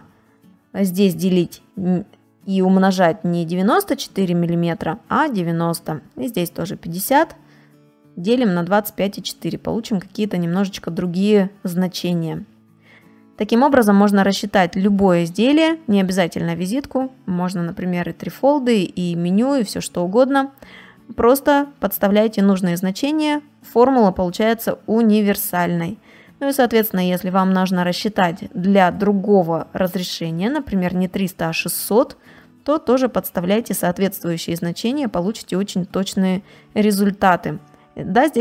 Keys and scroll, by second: 0.2 space, 7.9 space, 10.4 space, 24.0 space, 24.9 ctrl++, 26.0 space.